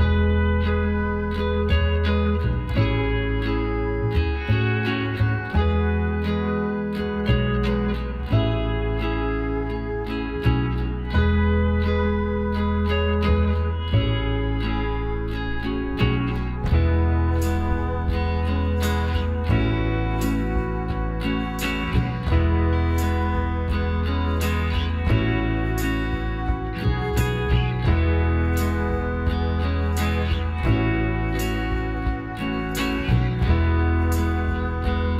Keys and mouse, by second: 1.4 click, 2.2-3.2 drag, 2.4 Tab, 3.4 middle click, 4.0 a, 6.5-8.2 drag, 8.2-10.5 middle drag, 14.9-16.9 right drag, 15.3 Tab, 20.0 KP_3, 21.5 KP_9, 22.9-24.7 right drag, 24.4-26.2 drag, 25.1-26.7 right drag, 27.4 shift+d, 30.5 s, 33.0-34.6 middle drag, 34.6 e.